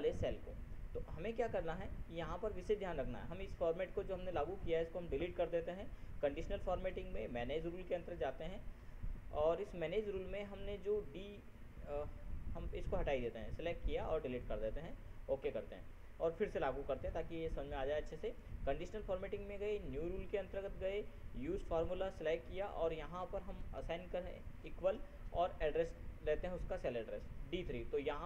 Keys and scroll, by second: 24.3 ctrl++.